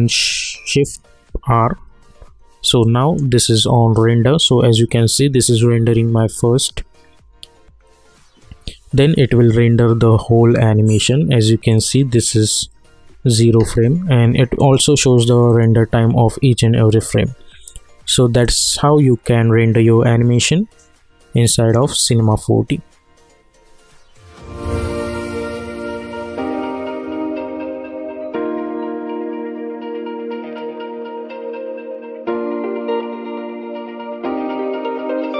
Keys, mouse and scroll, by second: 1.4 shift+r, 2.8 click, 3.5 scroll down 1, 3.6 scroll up 1, 4.0 scroll down 1, 11.7 click, 14.6 click, 18.4-24.0 drag.